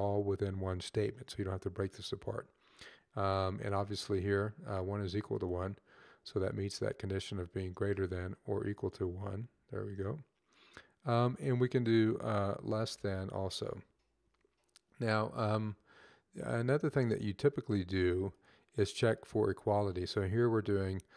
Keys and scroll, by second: 12.0 Left, 13.2 <.